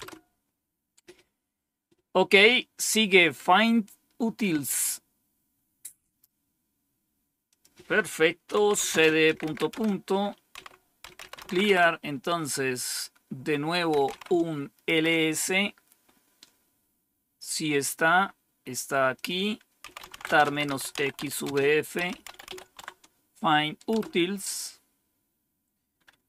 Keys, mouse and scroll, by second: 4.5 click, 7.4 click, 8.2-11.9 typing, 13.6-14.8 typing, 17.7 click, 19.1 click, 19.5-22.9 typing, 23.8 Return.